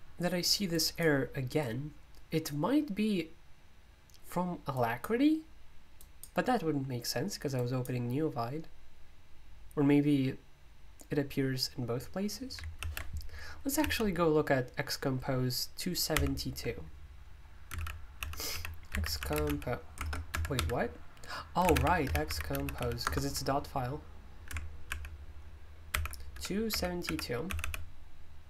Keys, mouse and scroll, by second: 0.7 click, 1.6-3.0 drag, 4.7 click, 6.0 click, 7.5 click, 16.1 super+u, 17.4-23.3 typing, 24.6-28.1 typing.